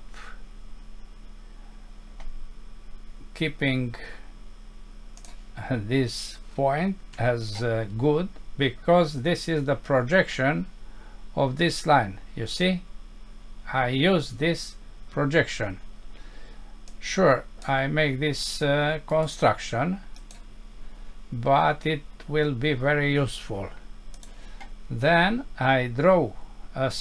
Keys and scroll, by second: 7.2 Escape.